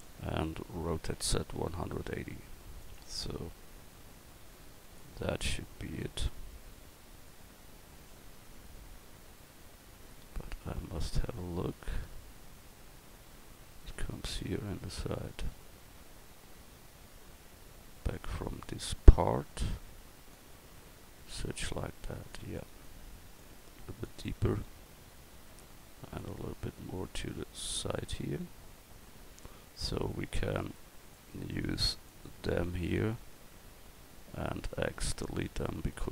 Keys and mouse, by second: 1.0 r, 3.9 click, 8.2-9.9 middle drag, 12.8 middle click, 20.3-22.3 drag, 26.2-29.4 drag, 30.6-32.6 right drag, 34.6 x.